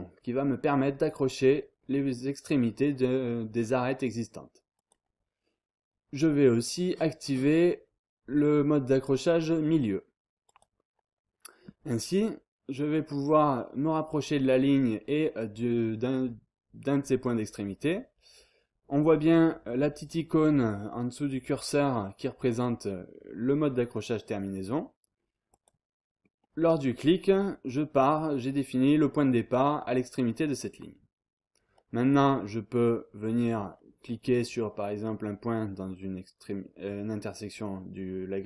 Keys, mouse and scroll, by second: 4.7 click, 10.4 click, 13.4-14.0 scroll up 1, 14.3-14.9 scroll down 1, 19.0-19.7 scroll up 1, 20.9-21.4 scroll down 2, 25.5 click, 26.3-26.8 scroll down 2, 27.6-28.3 scroll up 2, 28.7-29.2 scroll down 1, 29.5-29.8 scroll up 1, 29.8-30.9 scroll down 1, 34.9-35.5 scroll up 1.